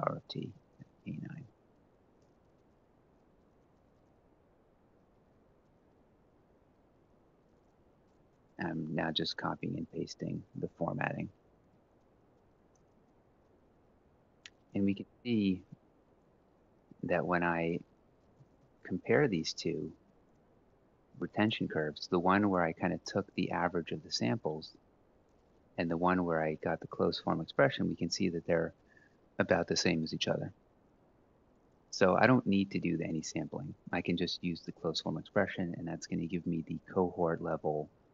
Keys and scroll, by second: 0.2-1.1 typing, 1.9 Return, 2.8 Up, 3.2 ctrl+Right, 3.4 Down, 3.6 1, 3.8 Left, 4.6 ctrl+c, 4.9 ctrl+shift+Right, 5.5 ctrl+v, 6.0 Up, 6.7 ctrl+c, 7.0 Down, 7.4 ctrl+shift+Right, 10.6-15.4 typing, 18.1 alt+i, 18.3 h.